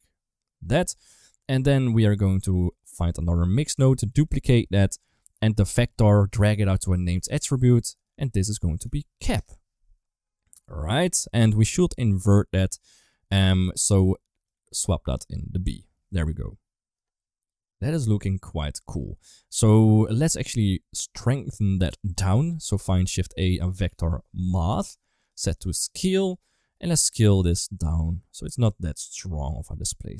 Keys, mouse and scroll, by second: 1.2 middle click, 2.2 middle click, 2.7 click, 3.3 click, 3.7 shift+d, 4.4 middle click, 5.0 middle click, 5.7-7.9 drag, 8.4 click, 10.5 middle click, 12.3 middle click, 14.3 click, 14.6 click, 16.1-16.8 middle drag, 17.7 KP_1, 19.4 middle click, 20.0 click, 21.2 click, 21.7 middle click, 22.0 click, 22.8 shift+a, 24.4 Down, 25.5-26.2 drag, 27.0-30.1 shift+drag.